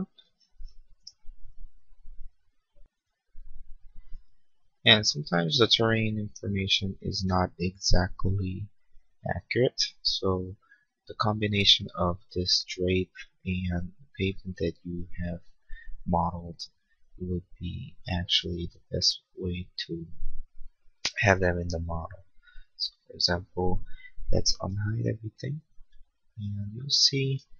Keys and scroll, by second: 24.9 shift+u.